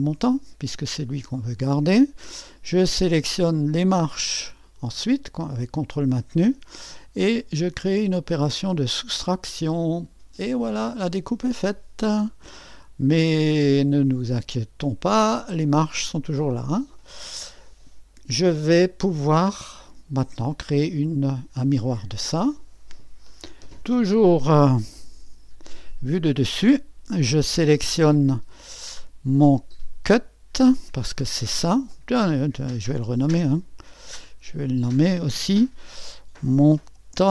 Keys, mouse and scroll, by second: 4.6-16.4 drag, 18.4-23.7 drag, 23.4-24.2 typing, 24.3-25.6 drag, 30.6-34.6 drag, 34.6 F2, 36.1-37.3 typing.